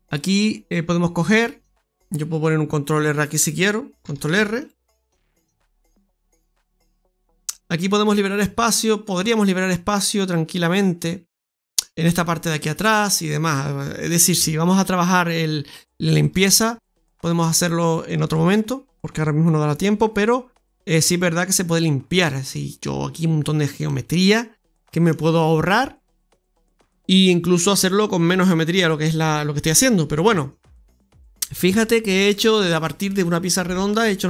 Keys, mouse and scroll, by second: 0.7 scroll up 1, 1.0 middle click, 1.8 click, 3.9 ctrl+r, 6.8 ctrl+z, 7.1 scroll down 1, 7.4 middle click, 8.7 middle click, 12.5-13.0 scroll down 2, 13.0 middle click, 16.1 right click, 16.7 middle click, 18.0 ctrl+shift+right click, 19.3 click, 22.0 middle click, 23.7 middle click, 24.7 shift+middle click, 27.3 shift+middle click, 27.3 middle click, 29.5 middle click, 29.5 scroll down 1, 29.7 middle click, 30.2 Tab, 31.9 scroll down 2, 32.2 middle click.